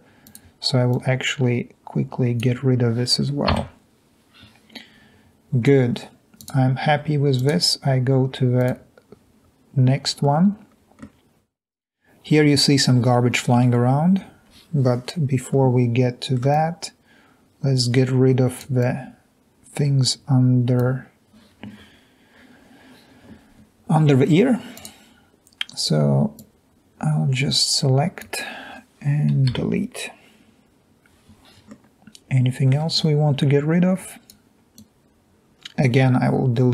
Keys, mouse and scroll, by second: 1.0-2.4 drag, 3.6 Delete, 15.7 middle click, 16.5 click, 27.0 click, 29.6 Delete, 35.1-36.7 drag.